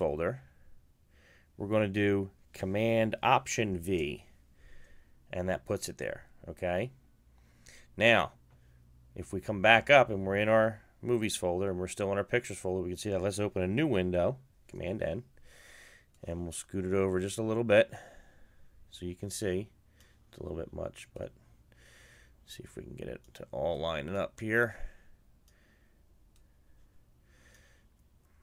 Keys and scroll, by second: 2.3 alt+super+v.